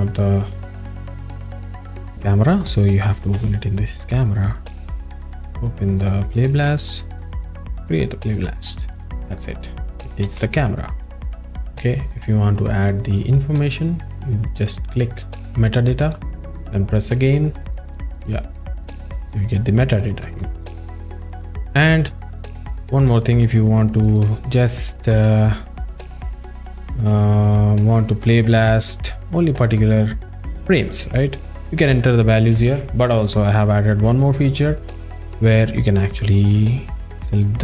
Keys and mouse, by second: 2.5 click, 3.3 n, 5.9 click, 6.2 click, 7.3 drag, 16.0-17.9 drag, 23.1 click, 23.4 Tab, 24.2 Tab, 25.2 `, 25.8 click, 37.4 click.